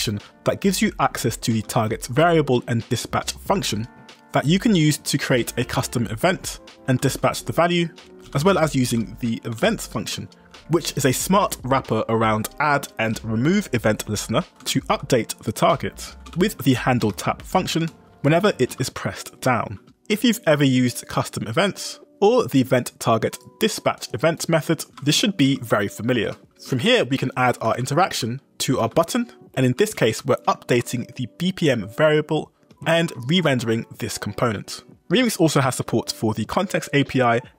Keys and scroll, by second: 4.6 ctrl+d, 5.5 ctrl+d, 6.9 shift+v, 7.6 Escape, 8.3 b, 9.6 w, 10.2 Escape, 10.8 g, 11.5 shift+v, 11.9 Escape, 14.3-19.3 typing, 19.4 Escape, 26.2-30.8 typing, 29.4 Escape, 32.7 Escape, 33.0 j, 33.5 shift+v.